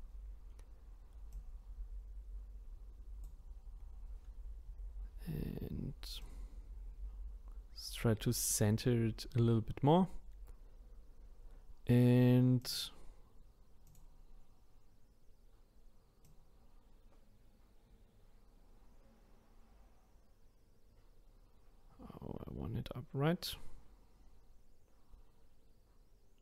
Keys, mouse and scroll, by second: 1.3 click, 6.2 click, 12.6-13.9 drag, 16.2 click.